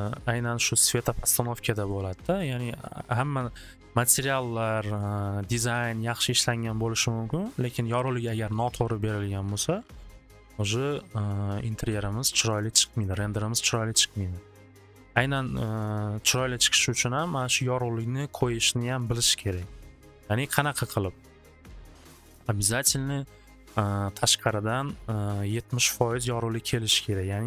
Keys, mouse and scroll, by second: 12.4 click.